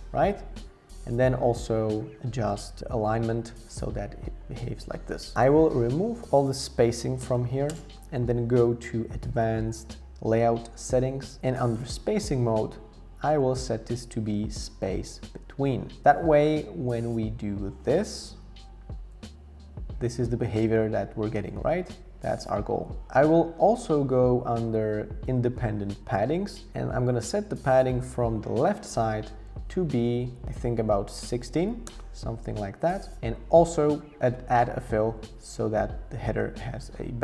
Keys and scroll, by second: 7.0-7.8 typing, 23.0 super+z, 29.4 shift+Up, 30.0 shift+Up, 30.4 Down, 31.9 Return.